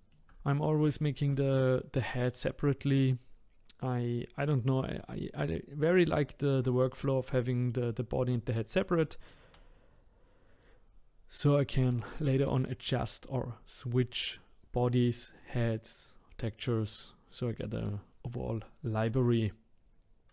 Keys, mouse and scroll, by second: 0.5-1.0 scroll down 3, 1.0-4.1 shift+middle drag, 9.0 shift+middle click, 9.8-10.5 scroll down 1, 10.5-12.7 scroll up 1.